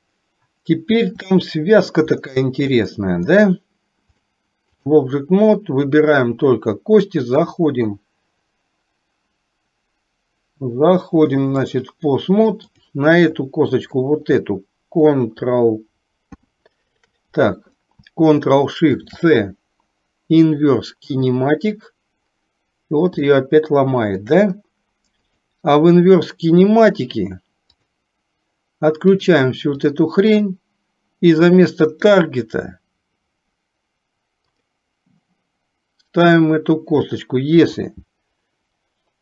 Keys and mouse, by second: 1.3 shift+middle click, 2.9 shift+middle click, 4.2 click, 6.1 click, 7.4-11.8 drag, 12.7 click, 16.3 ctrl+p, 18.9 ctrl+shift+c, 23.3-24.3 shift+middle drag, 25.3 click, 27.8 click, 29.9 click, 31.9 click, 36.3 click, 37.7 r.